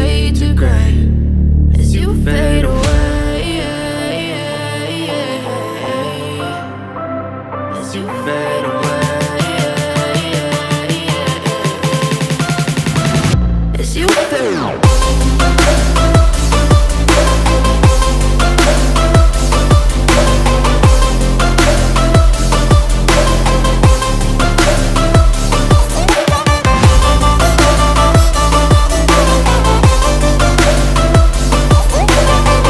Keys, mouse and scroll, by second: 5.9-11.0 drag, 15.6 alt+f, 15.7 alt+scroll down 1, 16.0 space, 16.2 click, 16.5 space, 22.3 click, 25.1 click, 29.5 click.